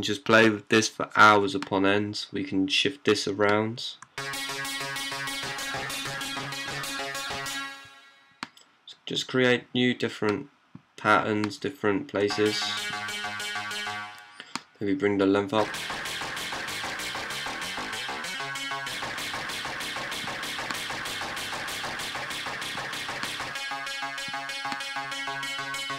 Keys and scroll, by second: 3.8-6.4 typing, 8.3 typing, 10.1 typing, 12.0-13.6 typing, 15.2-16.5 typing, 23.7-24.3 typing.